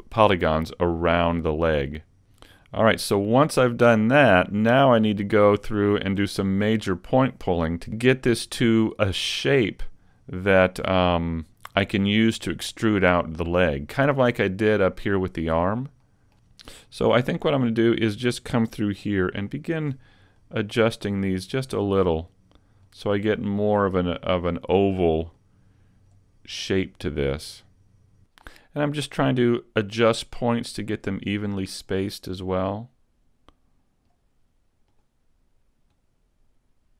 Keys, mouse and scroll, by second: 0.1 middle click, 2.8 scroll up 2, 3.9-4.2 scroll up 1, 4.4 middle click, 5.2 scroll down 3, 5.5 middle click, 6.8-7.2 scroll down 2, 7.2 middle click, 12.0 middle click, 15.6 scroll down 1, 17.6 right click, 20.4 click, 20.4 click, 22.0 right click, 22.8 click, 24.4 right click, 25.4 click, 27.0 right click, 27.6 click, 27.7 click, 29.2 click, 31.8 right click, 32.6 click, 34.9 right click, 36.0 click.